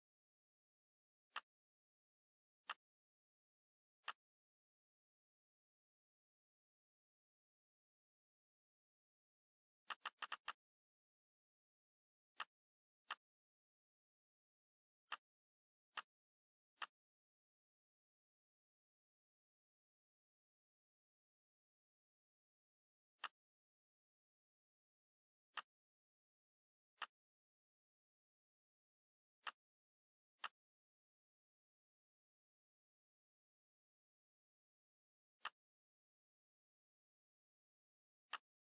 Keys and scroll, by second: 6.3 F9, 17.8-19.4 typing.